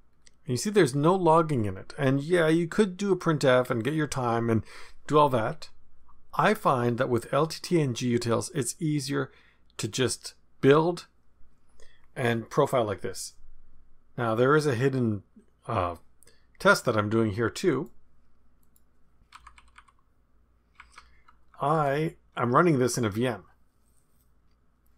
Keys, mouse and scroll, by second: 0.1-0.8 scroll down 1, 0.8-4.0 scroll down 1, 9.9 click, 17.7 click, 18.6 click, 19.4 Up, 19.6 Up, 19.7 Up, 20.8 Up, 21.0 Up, 21.1 Up, 21.6 Down, 21.6 Down, 22.4 Return.